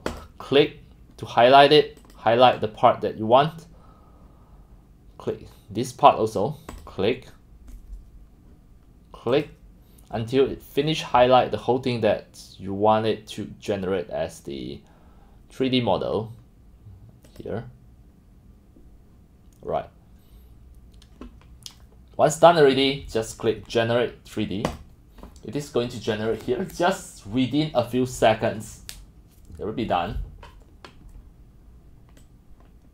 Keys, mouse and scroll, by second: 0.1 click, 2.0 click, 9.3 click, 17.3 middle click, 19.3 click, 19.8 click, 22.4 click, 24.8 click, 32.2-32.9 drag.